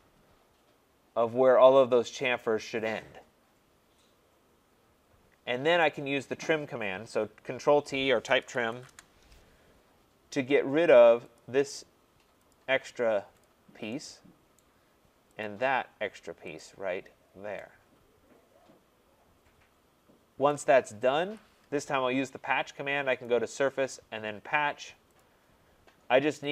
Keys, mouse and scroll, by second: 5.8 right click, 8.1-9.2 typing, 11.4 click, 12.5 click, 13.4 click, 14.6 right click, 15.4 click, 16.6 click, 17.2 scroll, 20.5 right click, 21.1 Return, 23.2 click, 25.2 click.